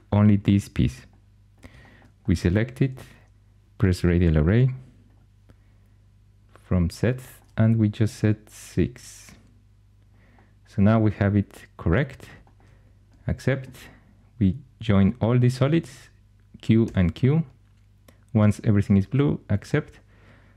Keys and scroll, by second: 15.7 q, 16.7 q.